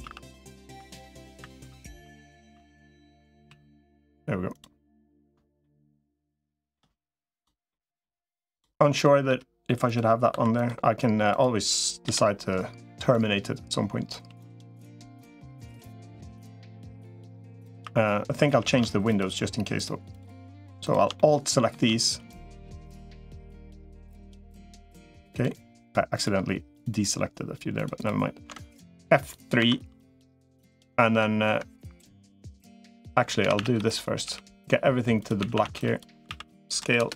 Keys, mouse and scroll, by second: 5.5-6.6 shift+middle drag, 7.5 middle click, 8.8 middle click, 10.2 2, 11.8 l, 13.0-14.0 drag, 14.2 s, 15.2-17.0 drag, 17.6 3, 18.4 a, 20.6 alt+shift+click, 20.9 middle click, 23.6 alt+shift+click, 24.2 alt+shift+click, 26.6 alt+shift+click, 27.8 alt+shift+click, 29.4 F3, 32.4-33.6 middle drag, 33.2 a, 33.4 a, 33.6 b, 34.0 g, 35.2 a, 35.4 a, 35.6 b, 36.0 s.